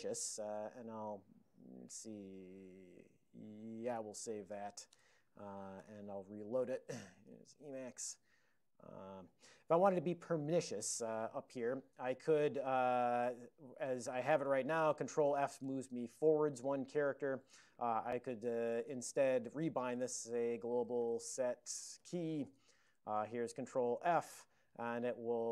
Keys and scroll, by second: 0.5 super+j, 1.1 super+[, 7.2-8.1 typing, 11.5 super+Up, 14.0 ctrl+p, 14.8 ctrl+f, 15.0 ctrl+f, 15.4 ctrl+f, 15.7-17.2 ctrl+f, 17.2 alt+>, 18.0 ctrl+p, 18.8 ctrl+e, 19.6 alt+x, 19.8-24.0 typing.